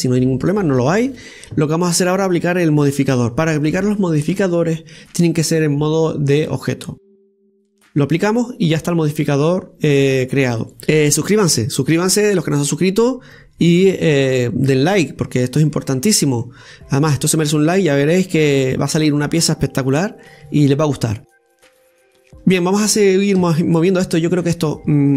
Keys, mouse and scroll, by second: 0.2-3.2 middle drag, 8.6-9.7 drag, 9.7-10.0 scroll down 2, 10.0-10.7 middle drag, 10.7 right click, 10.8-16.5 middle drag, 16.5-16.8 scroll down 1, 16.8-17.5 middle drag, 17.5-18.1 scroll up 1, 18.1-19.2 scroll up 1, 19.2 scroll up 1, 19.2-19.6 scroll down 2, 19.6-23.6 middle drag, 23.6 right click, 24.3 Tab, 24.7-25.1 middle drag.